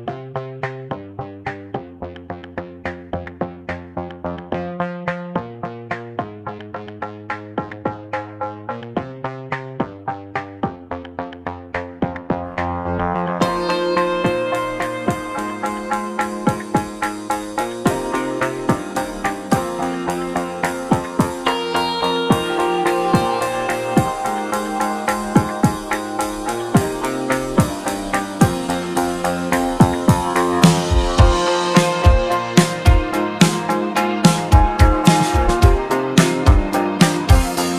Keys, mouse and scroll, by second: 1.1-2.2 shift+right drag, 2.2 shift+a, 3.5 Tab, 4.3 shift+a, 5.7 shift+a, 7.0 s, 9.8 s, 22.5 s, 26.1 g, 27.8 s, 31.8 g, 33.7-34.8 middle drag, 34.8 Tab, 35.5 click, 36.2 2, 36.7 click, 37.1-37.7 middle drag.